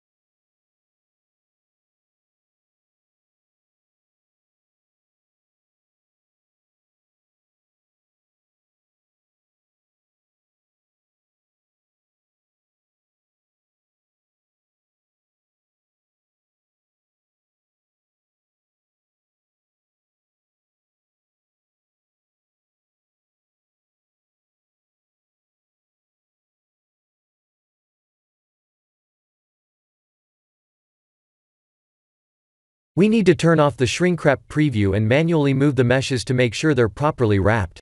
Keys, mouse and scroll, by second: 3.8 middle click, 4.1 middle click, 5.4 middle click, 5.5 middle click, 6.7 middle click, 8.3 click, 8.6 right click, 9.6 click, 9.9 right click, 10.9 click, 11.2 right click, 12.1 middle click, 13.4 shift+d, 16.5 middle click, 16.9 middle click, 18.5 g, 20.3 shift+d, 22.5 middle click, 23.0 middle click, 23.1 middle click, 23.4 middle click, 24.2 shift+d, 26.8 ctrl+a, 28.8 ctrl+a, 30.8 middle click, 31.4 g, 35.8 click, 37.3 click.